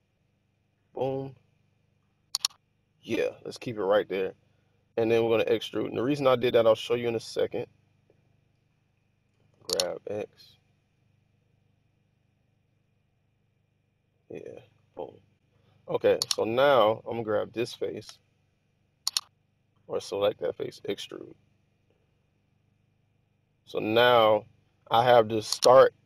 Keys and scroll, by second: 5.3 typing, 9.4-9.8 typing, 18.0 typing, 20.7 typing.